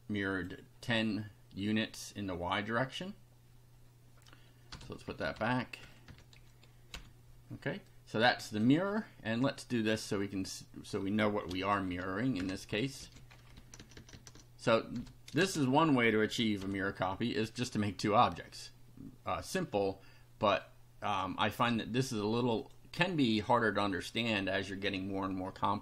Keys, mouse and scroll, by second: 4.7 BackSpace, 4.8 1, 5.1 Right, 5.3 Delete, 6.1 KP_0, 6.9 F5, 7.8 click, 10.2 click, 11.4 ctrl+c, 11.8 ctrl+Up, 12.4 ctrl+Return, 12.6 ctrl+Up, 13.0 ctrl+v, 13.3 ctrl+Home, 13.5 ctrl+Tab, 15.0 BackSpace, 15.4 space, 16.6 F5, 20.6-21.8 drag, 22.6 click.